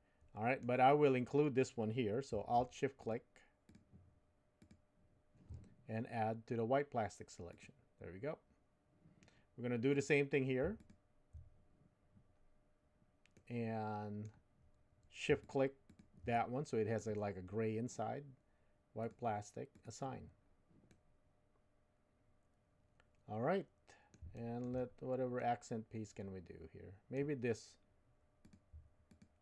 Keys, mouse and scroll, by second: 3.0 alt+shift+click, 3.7-5.5 alt+shift+drag, 7.5-10.1 drag, 13.4 middle click, 15.4 shift+click, 16.3 middle click, 19.0 click, 19.8 click, 20.9-24.2 middle drag, 24.3 shift+middle click, 25.3-27.4 middle drag, 28.4 click, 29.1 alt+click.